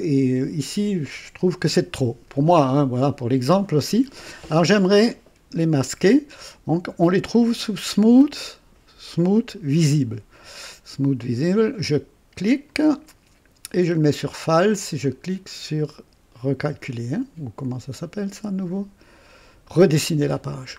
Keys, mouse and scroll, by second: 11.8 click, 12.7 click, 13.9 click, 15.0 click.